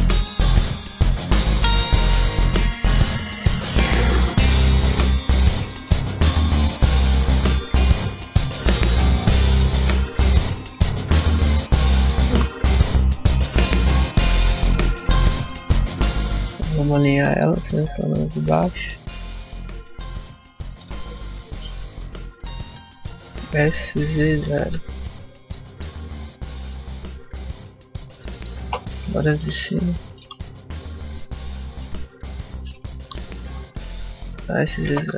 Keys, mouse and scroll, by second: 0.1 ctrl+r, 1.2 click, 1.4 ctrl+r, 2.5 click, 2.9 shift+middle click, 3.5 ctrl+r, 4.3 click, 4.4 ctrl+r, 5.1 click, 5.2 middle click, 5.6 shift+middle click, 6.1 ctrl+r, 7.3 click, 7.8 ctrl+r, 8.5 click, 8.7 ctrl+r, 9.4 click, 9.8 shift+middle click, 10.7 ctrl+r, 11.9 click, 12.2 ctrl+z, 12.7 ctrl+r, 13.6 click, 13.9 ctrl+r, 14.9 click, 15.2 shift+middle click, 16.1 alt+right click, 16.8 alt+shift+right click, 17.3 shift+middle click, 18.0 alt+shift+right click, 18.5 shift+middle click, 19.9 alt+shift+right click, 20.6 alt+shift+right click, 21.3 shift+middle click, 21.7 s, 25.4 middle click, 26.5 click, 28.1 middle click, 29.2 alt+right click, 29.9 alt+shift+right click, 30.4 shift+middle click, 30.9 alt+shift+right click, 31.7 alt+shift+right click, 32.4 alt+shift+right click, 33.0 s.